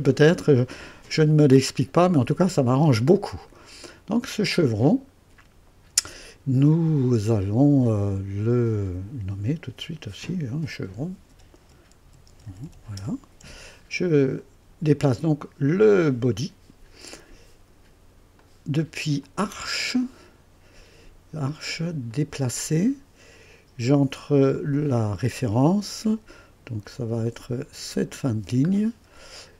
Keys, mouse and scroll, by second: 8.5 click, 9.9 F2, 10.9-13.1 typing, 14.3 click, 15.1 click, 18.3 click, 19.2 click, 22.1 click, 24.2 scroll up 2, 24.8 right click, 25.7 scroll up 2, 27.9 click, 28.7-29.2 scroll down 2, 29.4 right click.